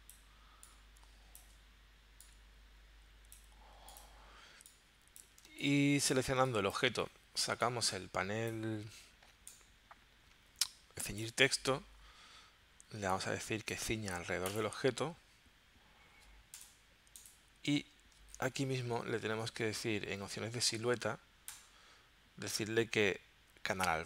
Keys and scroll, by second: 5.4 space.